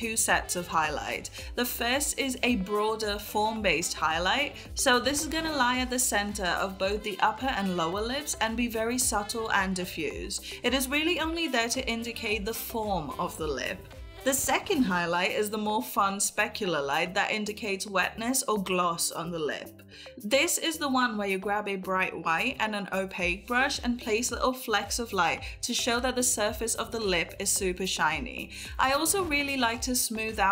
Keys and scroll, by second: 0.0-4.8 typing, 3.4 ctrl+s, 4.4 ctrl+z, 5.1 ctrl+z, 6.1 ], 6.2 [, 7.3 ctrl+e, 7.4 ctrl+0, 8.5-10.9 typing, 10.8 ctrl+z, 12.1 ], 12.4 ], 13.2 ], 14.4 ctrl+u, 17.1 ], 17.4 [, 19.9 ], 23.8 ctrl+z, 25.7 ctrl+z, 26.4 ctrl+z, 27.1 ctrl+z, 28.6 ctrl+s, 28.9 ctrl+s.